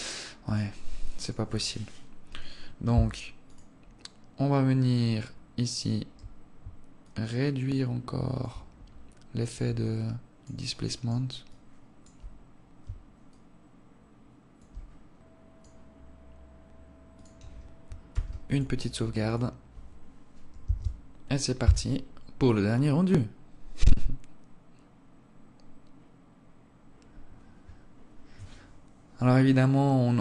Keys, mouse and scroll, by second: 1.7 click, 2.7 right click, 3.9 click, 7.5 shift+click, 9.3-10.4 scroll up 1, 10.4 alt+click, 10.4-11.0 scroll up 2, 11.2 alt+click, 13.7 shift+click, 17.5 click, 18.5 ctrl+s, 19.6 click.